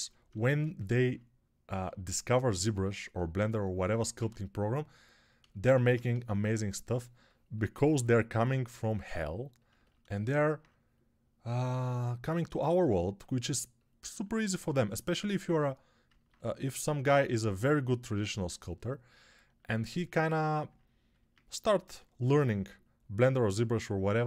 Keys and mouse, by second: 1.6 2, 4.0 1, 21.7 g.